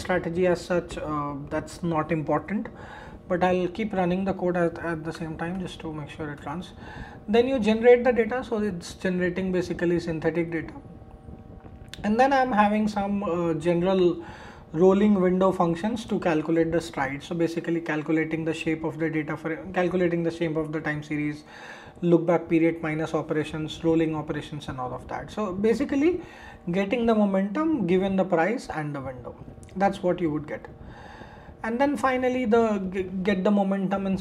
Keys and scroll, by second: 5.1 shift+Return, 32.3 shift+Return.